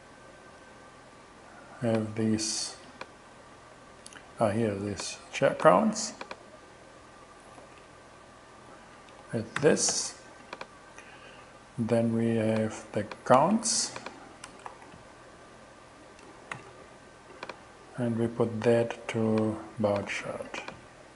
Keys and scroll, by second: 3.6 super+c, 5.7 super+c, 7.3 Return, 7.6 super+v, 9.6 shift+,, 13.4 super+c, 14.5 super+Return, 14.7 super+v, 16.6 shift+,, 20.1 super+c.